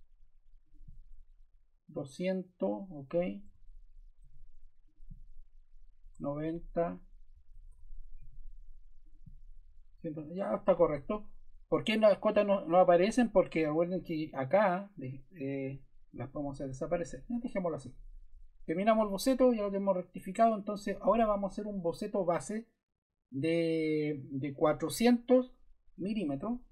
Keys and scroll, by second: 3.5 Escape, 4.2 d, 6.0 Escape, 6.4 d, 7.5 Escape, 8.2 d, 10.5 Escape.